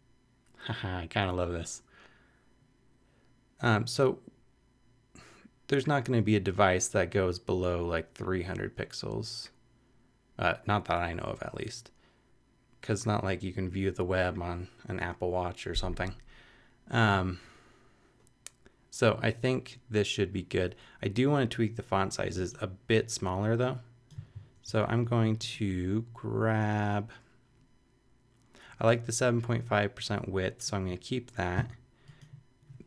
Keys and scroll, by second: 31.5 super+c.